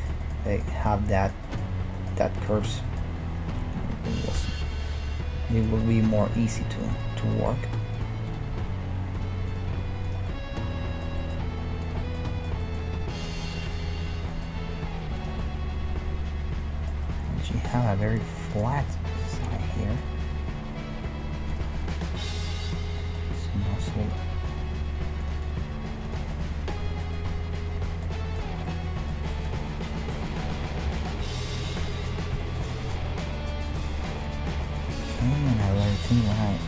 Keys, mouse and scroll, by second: 4.3 KP_1, 4.8-5.5 scroll up 1, 5.8-11.2 right drag, 6.5 g, 7.5 g, 8.5 g, 9.7 g, 10.3-16.0 middle drag, 11.8-15.7 right drag, 14.5 g, 19.3-21.3 right drag, 20.4 g, 22.4-27.2 right drag, 23.3-24.8 middle drag, 23.3 g, 24.8 g, 25.6 g, 26.3-33.7 middle drag, 30.8 KP_1, 33.7-36.0 right drag, 34.5 g, 35.3-36.6 middle drag.